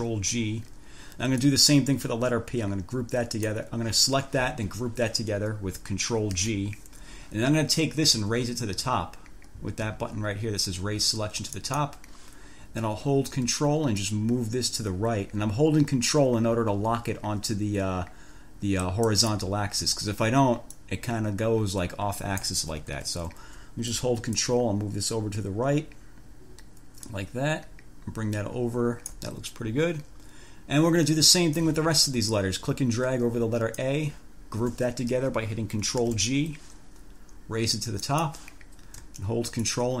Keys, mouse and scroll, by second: 1.6-3.9 drag, 6.5 ctrl+g, 11.7 click, 14.2-19.3 ctrl+drag, 19.1 ctrl+right click, 19.3 ctrl+scroll, 20.3 ctrl+scroll down 2, 21.0-22.9 drag, 23.1 ctrl+z, 24.5-29.5 ctrl+drag, 32.5-34.2 drag, 36.2 ctrl+g, 38.2 click, 39.8-40.0 ctrl+drag.